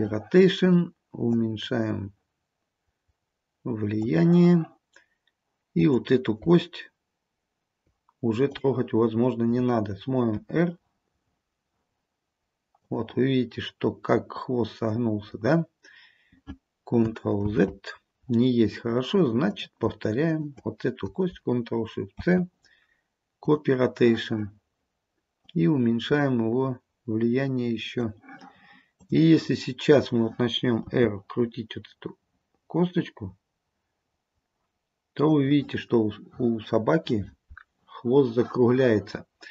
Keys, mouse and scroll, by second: 1.4 click, 5.9 click, 8.6 click, 10.4 r, 13.5-14.9 scroll down 2, 17.5 ctrl+z, 18.7-19.5 scroll up 3, 19.5 click, 20.3 shift+click, 21.9 ctrl+shift+c, 27.7 click, 29.1 click, 29.6-31.0 scroll down 2, 31.0 r.